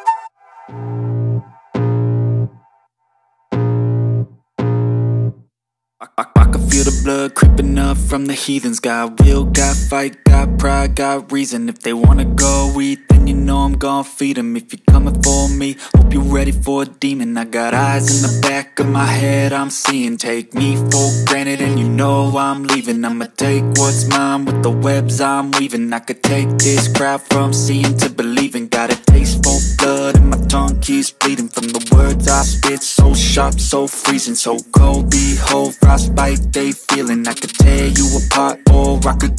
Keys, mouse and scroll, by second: 2.5-7.1 drag, 7.1 Tab, 8.5 Tab, 9.3 click, 10.3 Tab, 11.7 shift+Tab, 20.9 Tab, 20.9 click, 22.0 Tab, 24.0 click, 26.4 click, 30.2 click, 34.4 click, 35.2 Tab, 35.8 shift+Tab, 37.7 shift+Tab, 38.3 shift+Tab.